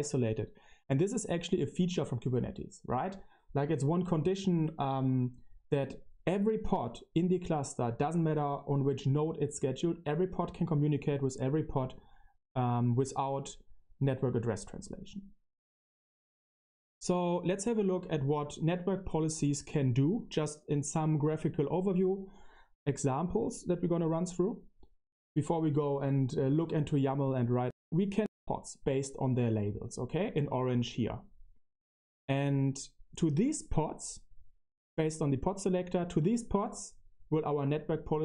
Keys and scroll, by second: 25.6 Right, 25.8 Right.